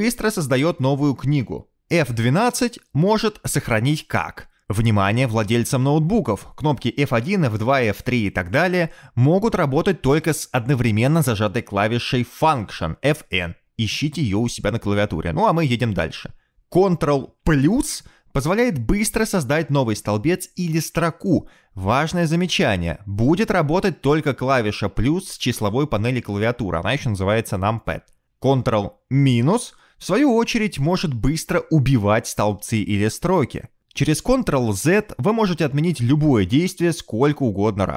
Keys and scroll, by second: 0.5 ctrl+n, 4.2 F12, 20.9 ctrl++, 21.7 ctrl++, 32.3 ctrl+-, 33.3 ctrl+-, 36.3 ctrl+z, 36.7 ctrl+z.